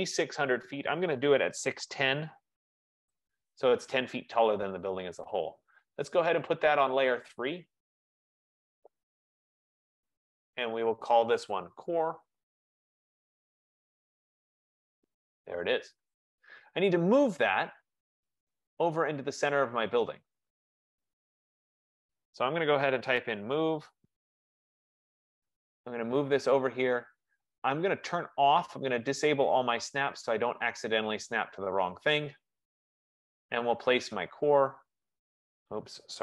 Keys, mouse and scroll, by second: 1.3-3.3 typing, 5.6 click, 7.8 right click, 9.4 click, 10.6 click, 10.9 click, 11.5 F15, 13.1 click, 13.8-15.0 typing, 18.3 click, 18.7 click, 21.0-21.9 scroll, 22.9-24.1 typing, 23.5 middle click, 25.6 click, 29.7 click, 29.7 click.